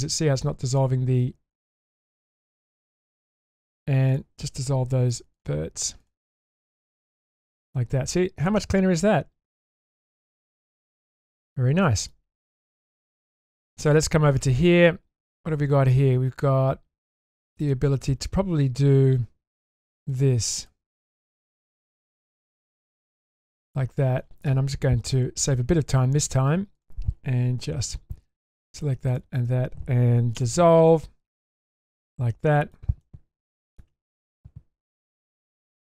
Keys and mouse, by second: 0.7 ctrl+click, 1.5 ctrl+click, 4.1 ctrl+click, 5.3 ctrl+click, 6.0 ctrl+click, 7.7-9.8 middle drag, 10.0 Tab, 10.8 Tab, 11.8 shift+middle drag, 12.5 middle click, 12.9-13.3 shift+middle drag, 13.6 middle click, 14.0-14.4 shift+middle drag, 15.3-17.6 middle drag, 20.1 click, 21.2 click, 22.7 ctrl+click, 25.1-26.4 drag, 27.6 2, 28.5 alt+click, 29.1 alt+shift+click, 30.4 ctrl+x, 31.5-32.7 middle drag, 33.0-33.8 shift+middle drag, 34.0-35.9 middle drag.